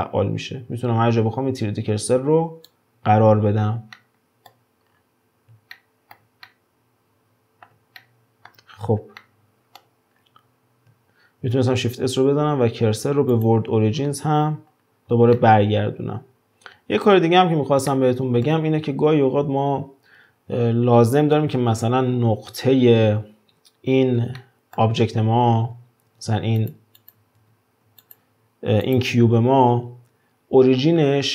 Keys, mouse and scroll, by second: 4.0-4.9 middle drag, 4.9-5.7 scroll up 1, 5.7-8.7 shift+middle drag, 8.7-9.2 scroll down 5, 9.2-10.2 middle drag, 10.2-11.5 scroll up 3, 11.5 shift+s, 14.0 scroll down 4, 14.7-15.4 scroll up 3, 15.4-16.4 shift+middle drag, 17.1-17.9 scroll up 1, 17.9-18.8 middle drag, 18.8-19.4 scroll up 4, 24.4-25.6 shift+middle drag, 25.6 alt+q, 26.0 alt+q, 26.6 click, 27.0 click, 27.4 alt+q, 28.0 drag, 28.8 click.